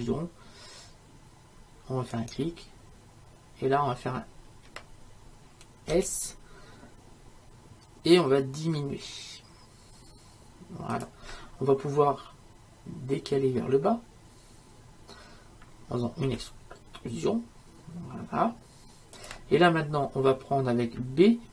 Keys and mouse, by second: 5.9 s, 16.3 e.